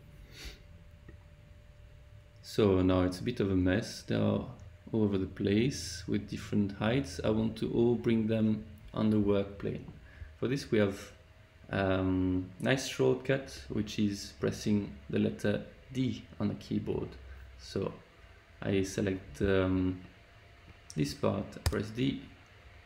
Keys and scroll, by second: 21.6 d.